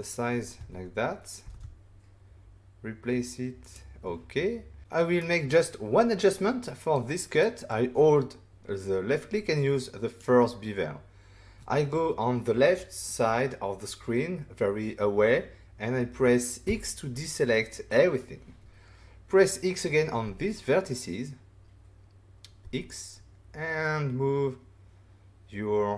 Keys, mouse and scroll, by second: 0.5 Tab, 1.1-1.9 typing, 3.6 click, 4.8 shift+middle click, 4.8 scroll down 1, 7.4 click, 16.6 x, 20.2 s, 22.6 x.